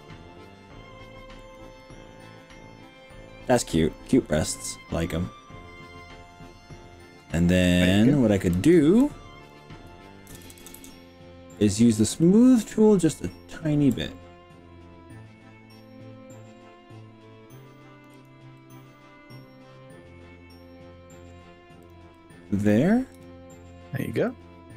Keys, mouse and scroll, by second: 1.4 click, 1.8-7.8 middle drag, 8.6 click, 9.0 click, 10.4 ctrl+KP_Add, 10.8 ctrl+KP_Add, 12.2-13.2 middle drag, 14.0 click, 18.2 click, 18.6-21.3 middle drag, 21.8 click, 22.1 middle click, 23.2 KP_3, 24.2 g.